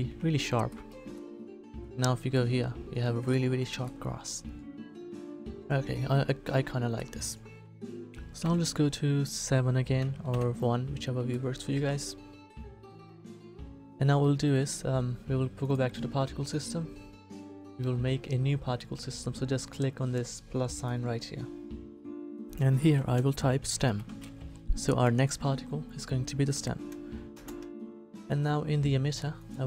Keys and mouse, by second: 0.1 Tab, 8.4 KP_7, 10.3 KP_1, 15.6-20.7 middle drag.